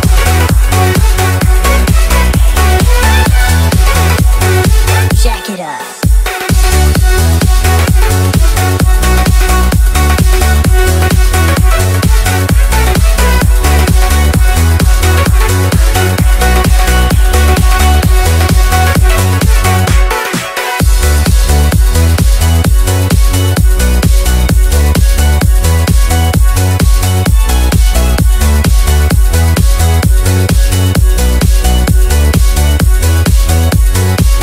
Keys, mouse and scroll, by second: 0.7-3.2 typing, 3.7 right click, 5.9 click, 6.1 typing, 7.6 F2, 9.3-11.3 typing, 12.2 click, 13.1 right click, 14.2 click, 15.0-20.6 typing, 21.4 click, 22.1-23.5 typing, 24.0 Return, 25.4 click, 27.0-29.1 drag, 29.1 right click, 29.9 click, 30.8-31.7 typing, 33.3-34.4 typing.